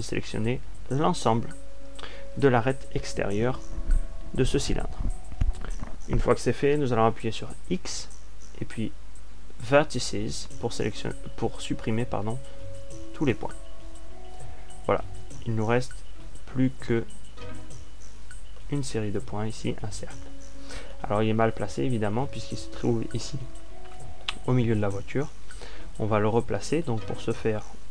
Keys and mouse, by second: 0.0 click, 8.6 x, 20.9-25.7 middle drag.